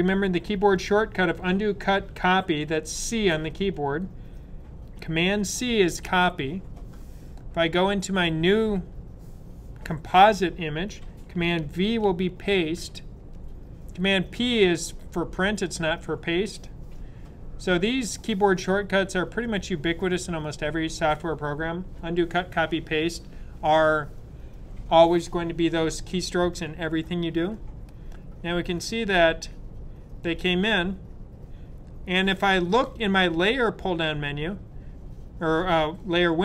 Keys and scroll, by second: 5.5 super+c, 12.3 super+v.